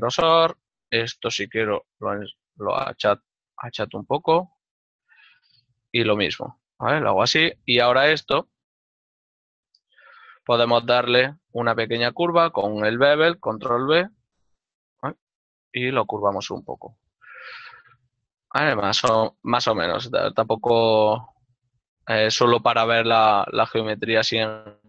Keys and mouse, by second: 0.4 middle click, 4.4 alt+right click, 4.7 middle click, 8.2 x, 9.0 alt+right click, 9.1 z, 9.3 click, 10.2 middle click, 11.5 middle click, 14.1 ctrl+b, 17.0 click, 17.6 Tab, 18.4 click, 20.0 ctrl+middle click, 21.3 Tab, 23.5 click.